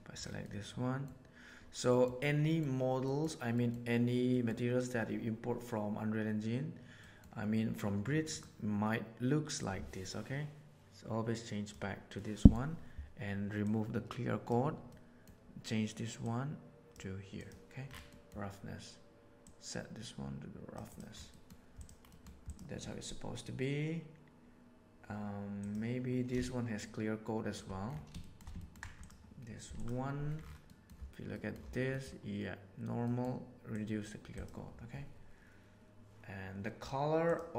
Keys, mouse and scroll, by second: 0.4 middle click, 1.9 middle click, 2.5 middle click, 3.1 middle click, 3.4 middle click, 4.3 middle click, 7.1 middle click, 8.2 click, 9.5-11.6 drag, 12.1 middle click, 13.5 click, 14.9 middle click, 16.1-16.9 drag, 17.4 drag, 18.1 middle click, 19.3-20.7 drag, 20.8 click, 21.2 middle click, 22.0 middle click, 22.5 click, 25.5 click, 26.3-27.5 shift+middle drag, 28.1 shift+middle drag, 28.5 ctrl+middle click, 30.7 middle click, 31.4 middle click, 32.9 middle click, 33.7 click, 34.3 click.